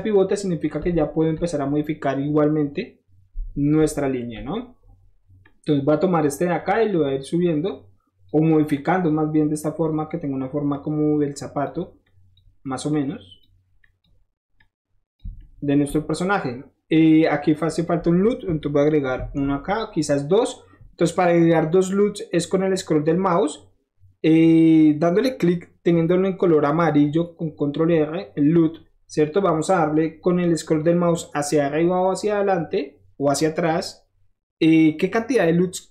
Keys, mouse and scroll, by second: 0.4 middle click, 0.9 shift+middle click, 3.9 shift+middle click, 5.4 shift+click, 6.5 shift+click, 7.4 click, 8.7 click, 9.6 click, 10.7 click, 12.0 click, 12.9 click, 13.7 click, 14.5 click, 15.3-16.9 middle drag, 19.1 ctrl+r, 23.4 middle click, 23.5-24.5 middle drag, 24.6-29.2 middle drag, 32.6-34.0 middle drag, 34.5-35.9 middle drag.